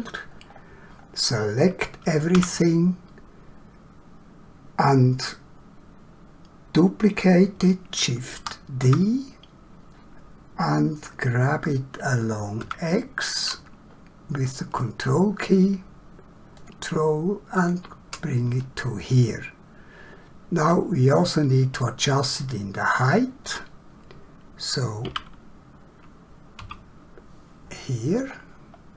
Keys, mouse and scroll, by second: 0.5 scroll down 1, 1.0 scroll up 1, 2.3 a, 8.4 shift+d, 12.6 x, 16.6 ctrl+click, 19.1 middle click, 28.7-28.9 scroll down 1.